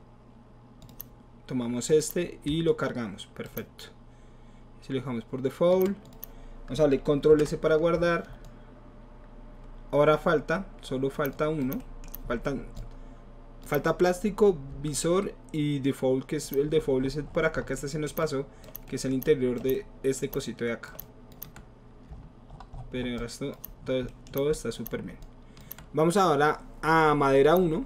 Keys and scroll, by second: 7.3 ctrl+s.